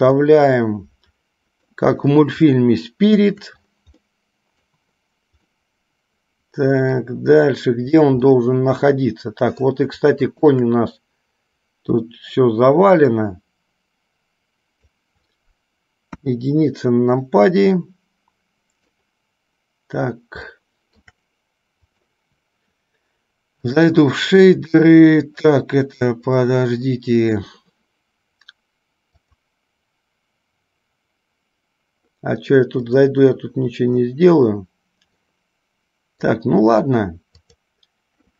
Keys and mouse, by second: 0.4-1.6 middle drag, 1.8 middle click, 2.6-3.6 shift+middle drag, 4.3-4.9 middle drag, 5.6-7.3 middle drag, 8.5-10.0 middle drag, 10.4 shift+click, 12.3-15.1 drag, 18.0-19.1 middle drag, 20.8-21.3 shift+middle drag, 22.1 click.